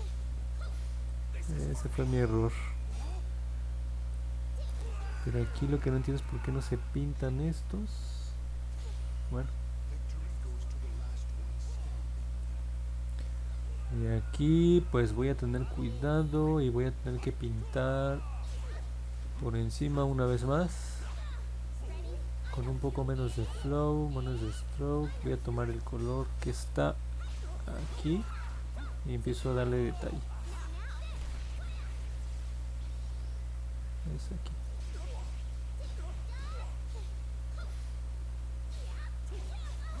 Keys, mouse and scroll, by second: 0.6 alt+click, 1.5 alt+middle click, 2.3 scroll up 1, 2.5 middle click, 3.1-4.1 alt+drag, 6.3-8.1 drag, 9.7 middle click, 10.0 middle click, 10.4-12.4 alt+drag, 12.8 alt+middle click, 13.6 scroll up 1, 28.8 click, 29.3 click, 29.8 click, 30.2 click, 30.5 click, 31.4 click, 33.7 ctrl+z, 36.3 click, 36.7 click, 37.9 click, 38.2 click, 38.6 click, 39.0 click, 39.4-40.0 drag.